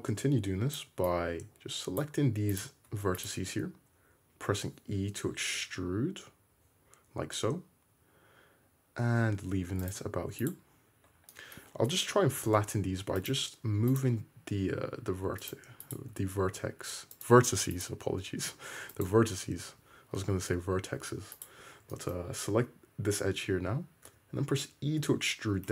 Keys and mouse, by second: 2.6 ctrl+middle click, 3.2 ctrl+click, 3.4-10.0 middle drag, 4.0 e, 10.0 click, 11.2-14.0 shift+drag, 12.4 g, 14.0-15.9 middle drag, 14.2 g, 15.9 click, 16.0-17.8 middle drag, 16.2 g, 17.8 click, 17.9-21.4 middle drag, 18.1 g, 21.0 2, 21.4 click, 21.5-25.7 middle drag, 24.1 e.